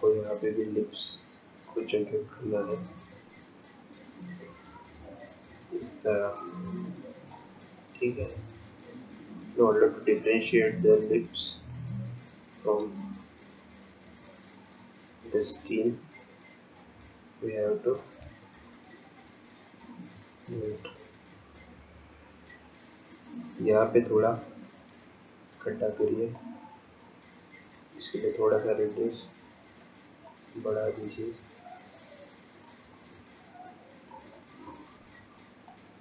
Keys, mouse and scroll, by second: 3.2 ctrl+click, 8.1 ctrl+click, 13.1 shift+click, 19.9 shift+click, 25.1 click, 26.4 click, 34.4 click.